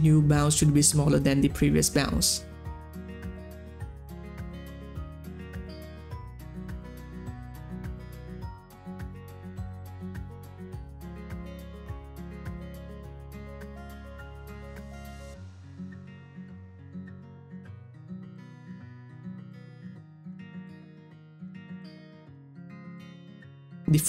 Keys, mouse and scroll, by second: 16.0 click, 21.3-24.0 drag.